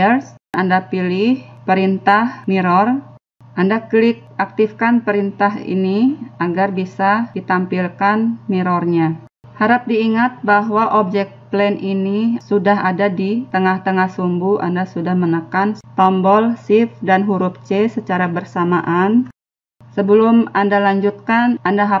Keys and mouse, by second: 1.7-2.7 drag, 6.4-7.6 drag, 8.7 click, 10.5 middle click, 15.2-22.0 middle drag.